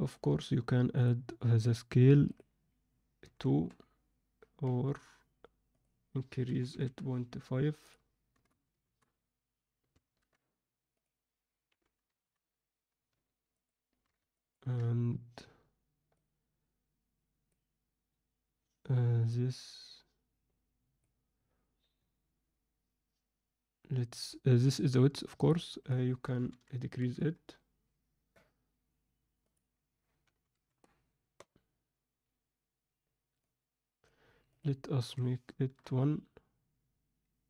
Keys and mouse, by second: 2.4-4.6 drag, 5.6-9.9 drag, 11.0-13.3 drag, 13.6 ctrl+alt+middle click, 14.4 ctrl+alt+middle click, 16.2-17.4 drag, 19.2-21.3 drag, 25.4-32.2 drag, 33.4 click, 34.7-36.9 drag.